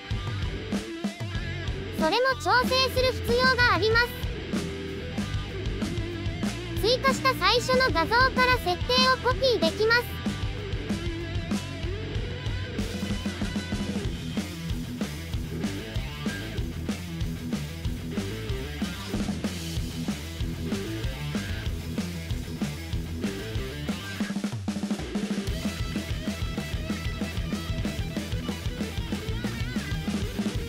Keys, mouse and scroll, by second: 0.1 drag, 1.3 click, 2.0 click, 2.5 click, 3.6 drag, 4.0 right click, 5.8-8.1 typing, 6.5 shift+middle click, 8.0 shift+middle click, 8.6 shift+middle click, 9.2 click, 9.7 shift+c, 9.8-10.3 scroll up 4, 10.0 shift+middle click, 10.3 shift+middle click, 10.7 KP_1, 10.9 KP_3, 11.3 KP_1, 11.4 KP_3, 12.5 ctrl+KP_3, 13.0 KP_1, 13.2 shift+middle click, 13.4 KP_3, 14.1-14.7 scroll down 2, 14.7 KP_3, 14.9 KP_3, 14.9 shift+middle click, 15.1 scroll up 2, 15.1-15.6 shift+middle drag, 15.6 KP_1, 15.7 KP_3, 16.2 scroll up 2, 16.4 shift+middle drag, 16.7 scroll down 7, 16.7-17.1 shift+middle drag, 17.6 shift+middle click, 18.4 click, 18.8 click, 19.6 click, 20.0 shift+middle click, 20.2 KP_3, 20.5 middle click, 20.6 KP_1, 21.0 scroll up 4, 21.1 shift+middle click, 21.2 shift+middle click, 21.7 click, 21.8 KP_3, 22.1 click, 22.4 scroll down 3, 22.6-23.1 scroll up 2, 23.5 click, 24.3 click, 24.7-27.2 drag.